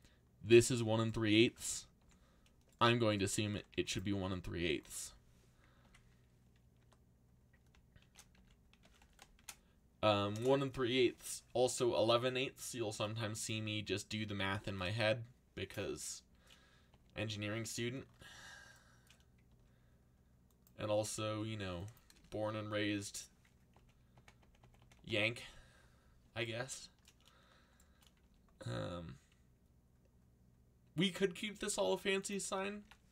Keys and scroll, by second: 2.0 z, 3.2-4.0 typing, 5.8-9.8 typing, 10.3 Return, 19.5 k, 20.7-21.7 typing, 22.1 Return, 28.2 k, 32.3-33.1 typing.